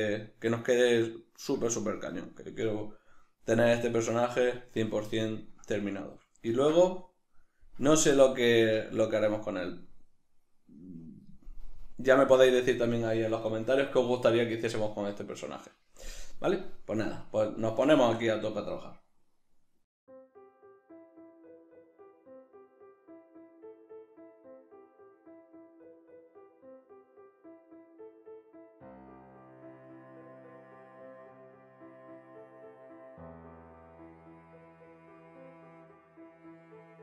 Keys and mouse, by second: 30.1-30.6 right drag, 30.6 alt+q, 30.8-37.0 ctrl+shift+middle drag, 33.3 alt+q, 34.4 \, 35.6 alt+q, 36.8 b.